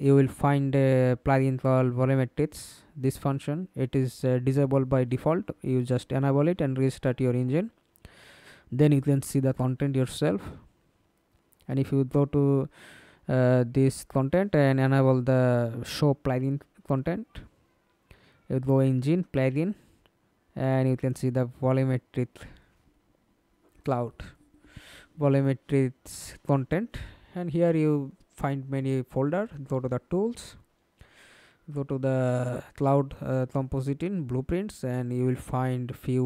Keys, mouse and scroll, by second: 0.0-2.3 typing, 9.5 middle click, 9.7-10.4 scroll down 1, 10.4 scroll down 1, 10.7 ctrl+space, 19.5 double click, 20.5-22.2 scroll down 26, 22.2-24.0 scroll down 21, 24.0-25.7 scroll down 9, 29.9 double click, 31.8 double click, 32.9 double click.